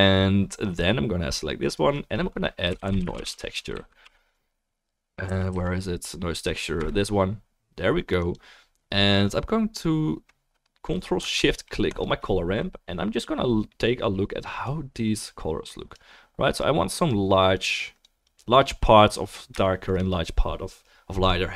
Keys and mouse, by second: 1.3-1.7 drag, 1.3-1.7 middle drag, 5.5 Down, 8.3-17.1 right drag, 11.9 ctrl+shift+click, 11.9 ctrl+shift+middle click, 14.7-17.1 drag, 17.7 click, 17.7 middle click, 17.7 right click.